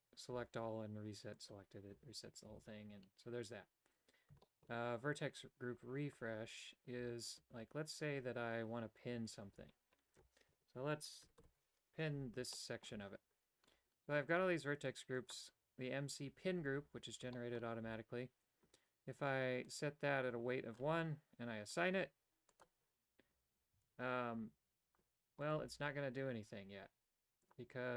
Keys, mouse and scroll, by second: 1.4 click, 1.6-2.6 typing, 4.5 shift+middle click, 9.5 alt+right click, 11.2 ctrl+KP_Add, 11.5 ctrl+KP_Add, 12.6 shift+middle click, 15.2 click, 17.4 shift+middle click, 19.7-20.8 drag, 21.8 click, 22.6 click, 23.8 a, 25.5 right click, 25.9 g.